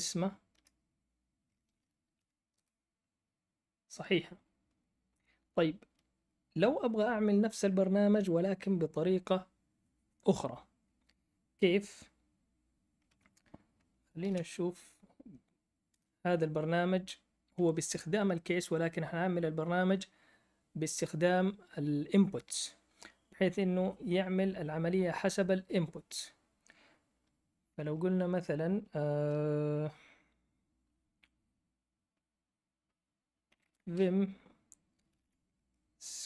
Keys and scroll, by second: 0.5 BackSpace, 2.1-2.5 typing, 14.1 ctrl+l, 33.2-36.2 typing.